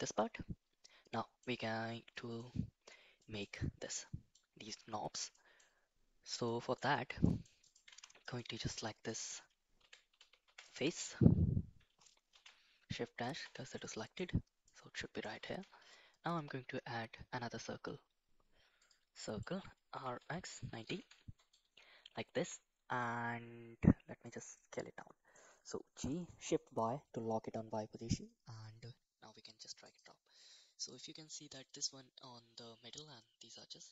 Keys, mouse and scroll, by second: 1.1 middle click, 2.1 middle click, 3.1 middle click, 3.9 middle click, 5.3 middle click, 6.4 shift+middle drag, 7.2 scroll up 1, 7.2 middle click, 7.4 scroll down 1, 7.6 click, 7.8 Tab, 8.2 click, 8.8 middle click, 9.7 3, 10.1 2, 10.4 3, 10.6 click, 12.3 shift+s, 13.4 Tab, 13.8 middle click, 14.6 middle click, 15.4 shift+a, 19.2 middle click, 19.9 r, 22.3 s, 24.6-25.3 middle drag, 25.9 g, 30.9-31.5 middle drag.